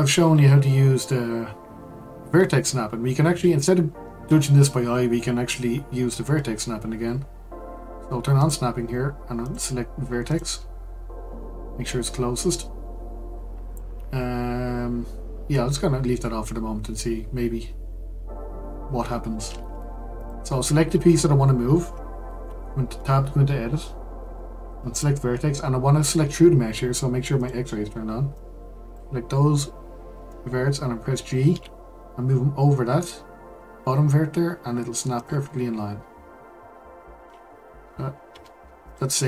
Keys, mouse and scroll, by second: 8.4 click, 9.4-12.6 drag, 20.1 click, 22.4 Tab, 24.9-28.4 drag, 31.5 g, 36.0-37.0 scroll down 6, 37.0-38.3 scroll down 2, 38.3 Tab, 38.8 click.